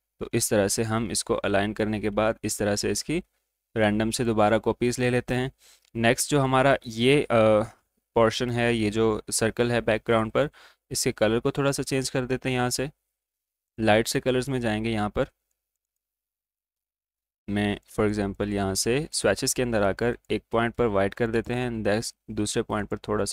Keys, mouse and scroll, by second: 4.1 click, 10.2 click, 13.7 click.